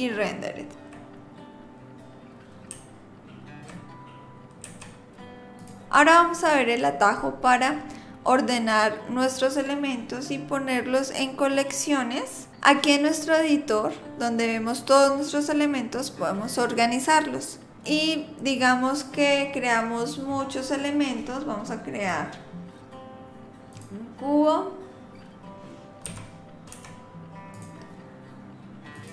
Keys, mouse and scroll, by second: 2.7 z, 4.7 z, 17.7 click, 18.5 click, 22.0 click, 26.1 g, 29.0 click.